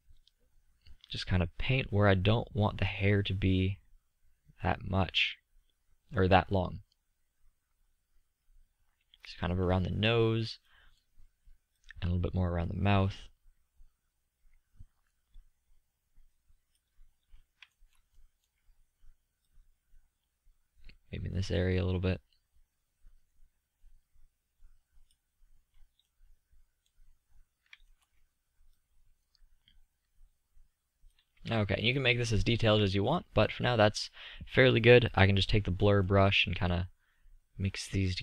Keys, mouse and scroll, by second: 1.5-3.1 drag, 10.1 middle drag, 10.5-11.1 middle drag, 11.1-13.6 drag, 13.6-17.3 middle drag, 18.7-21.3 drag, 21.5-25.8 middle drag, 26.3-32.0 middle drag, 36.1-38.1 drag.